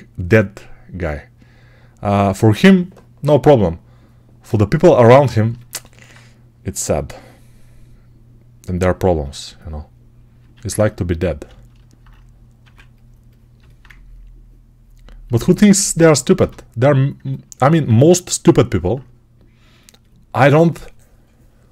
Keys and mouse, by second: 10.2-16.2 alt+drag, 10.4 alt+q, 12.5 1, 16.2-21.7 shift+right drag.